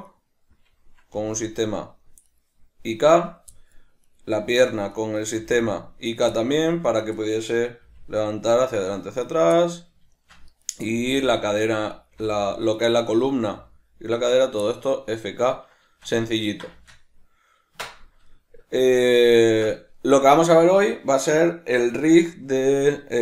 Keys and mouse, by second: 0.1 right click, 1.2 g, 2.4 right click, 3.6-4.0 middle drag, 4.0 right click, 4.4 g, 5.2 right click, 5.4 g, 6.2 right click, 6.4-6.8 middle drag, 6.8 right click, 7.2-9.4 middle drag, 7.8 r, 9.4 right click, 9.6-10.6 middle drag, 10.6 right click, 11.0 r, 11.9 right click, 12.1 r, 13.1 right click, 13.5 r, 14.3 right click, 14.7-23.2 shift+middle drag, 17.7 \.